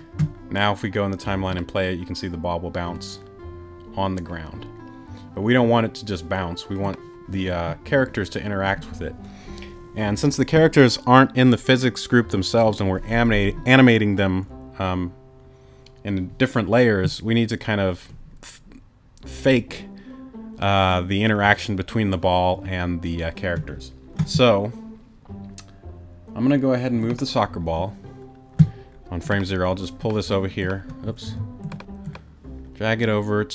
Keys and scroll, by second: 31.2 t.